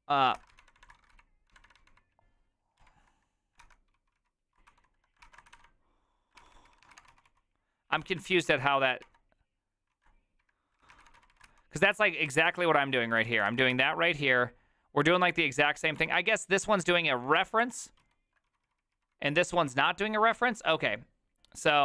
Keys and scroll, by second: 0.4 ctrl+c, 0.5-14.0 typing, 5.2 ctrl+c, 6.4 ctrl+c, 6.5 ctrl+c, 7.9 ctrl+a, 8.3 ctrl+c, 8.4 ctrl+c, 8.5 Up, 9.9 ctrl+a, 12.3 ctrl+c, 12.5 ctrl+d, 16.0 ctrl+d, 16.5-20.4 typing.